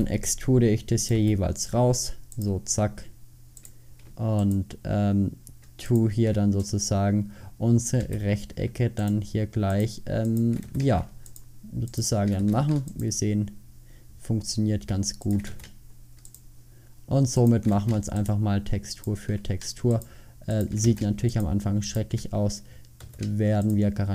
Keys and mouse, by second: 0.0 e, 1.2 e, 8.1 f, 10.7 f, 12.5 f, 15.6 f, 17.8 f, 21.0 f, 23.1 f.